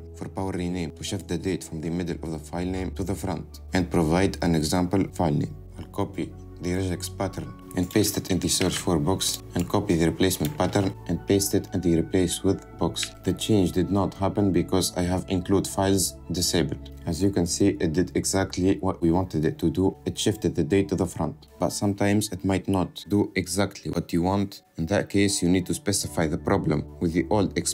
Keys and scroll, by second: 7.8 ctrl+c, 8.8 ctrl+v, 11.2 ctrl+c, 12.5 ctrl+v.